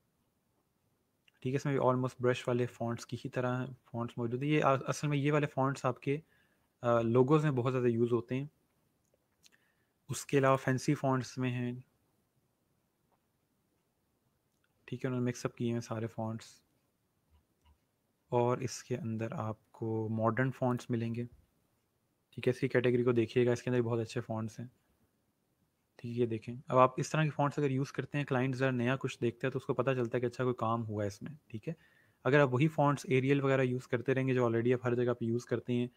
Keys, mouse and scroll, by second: 6.1 scroll up 1, 10.4 click, 11.7 scroll down 1, 17.1 scroll, 17.3 scroll up 1, 20.6 click, 23.4 scroll down 1, 25.3 scroll up 1, 27.1 scroll down 1, 31.5 scroll up 1.